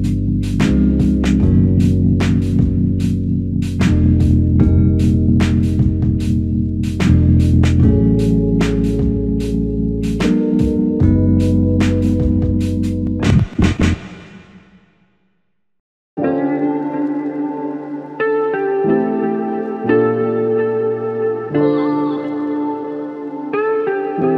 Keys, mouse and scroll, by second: 10.1 scroll down 1, 21.9 ctrl+click.